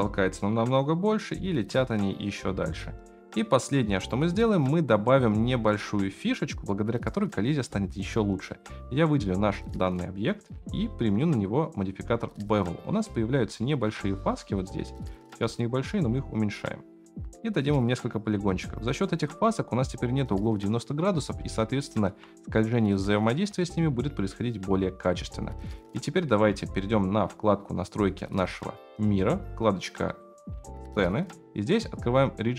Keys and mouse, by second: 6.0 space, 8.5-9.0 drag, 10.4 click, 11.2-13.5 drag, 13.6 shift+middle click, 15.4-16.9 shift+middle drag, 17.8 middle click, 18.4 right click, 21.5-22.0 shift+middle drag, 24.7 click, 25.6-26.2 shift+middle drag, 30.0 click.